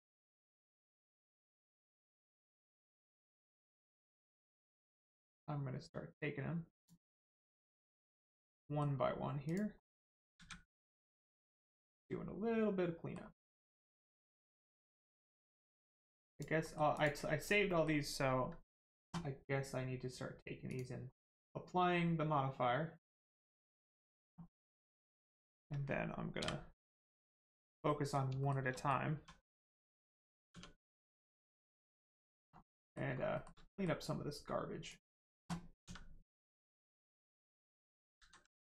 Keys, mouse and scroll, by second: 0.5-0.8 scroll down 1, 0.9 middle click, 0.9 middle click, 6.7 click, 7.9-8.5 scroll up 1, 8.6 middle click, 9.5 click, 9.8 middle click, 10.3 a, 10.7 middle click, 13.5 click, 15.9 middle click, 16.3 click, 16.6 middle click, 16.9 click, 17.6 middle click, 20.7 click, 21.1 middle click, 23.0 click, 24.5 middle click, 24.8 shift+middle click, 25.1 scroll up 1, 26.9 middle click, 27.4 scroll up 1, 27.8 middle click, 28.4 shift+middle click, 28.7 middle click, 28.8 middle click, 29.1 1, 29.4 middle click, 30.5 Tab, 30.9 middle click, 31.2 shift+middle click, 31.6 middle click, 31.6 middle click, 32.1 scroll up 1, 32.8 middle click, 33.1 shift+scroll up 1, 33.3 shift+middle click, 33.6 middle click, 33.7 middle click, 34.0 scroll up 1, 34.8 click, 35.8 x, 37.4 click, 38.2 ctrl+z.